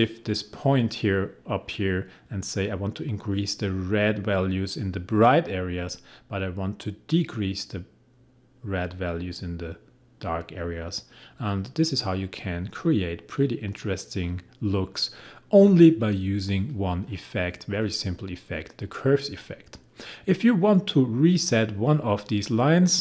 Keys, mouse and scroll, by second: 6.8-16.8 drag.